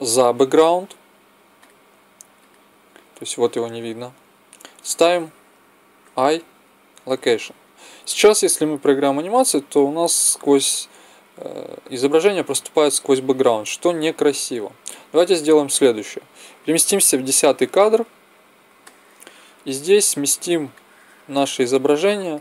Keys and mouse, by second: 1.6-3.4 drag, 6.0 i, 8.4-10.4 drag, 16.6-18.6 drag, 19.0 middle click, 20.7-22.4 drag.